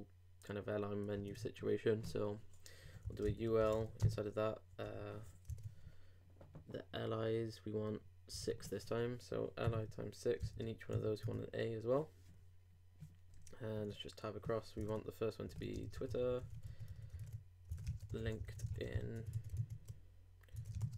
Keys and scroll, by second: 1.3 super+Tab, 3.2 shift+l, 4.0 shift+i, 4.8 shift+BackSpace, 5.4 super+BackSpace, 5.6 super+Tab, 8.4 super+Tab, 10.4 shift+6, 10.9 shift+a, 14.8 super+Tab, 15.7 shift+super+Tab, 15.8 shift+super+t, 15.9 shift+w, 17.1 super+Tab, 17.8 shift+super+Tab, 17.9 shift+super+l, 18.1-19.4 typing, 19.5 super+Tab, 20.7-20.9 typing.